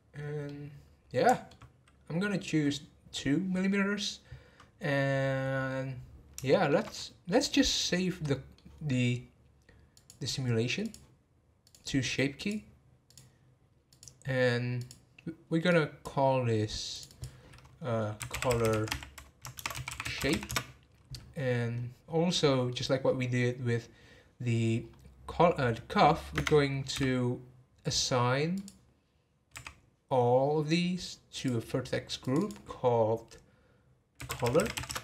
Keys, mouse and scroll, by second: 0.5-3.5 middle drag, 6.5-6.9 shift+middle drag, 6.9-7.8 scroll up 1, 7.8-9.9 middle drag, 9.9 click, 10.8 click, 11.6-13.1 drag, 13.9 click, 14.8 click, 15.6-17.0 drag, 17.1-18.6 drag, 18.6 l, 22.0 scroll down 2, 22.3-23.3 middle drag, 23.3 scroll down 1, 24.8 scroll up 1, 26.3 Tab, 28.5-29.5 drag, 29.5 a, 31.3-32.3 drag, 34.6 l.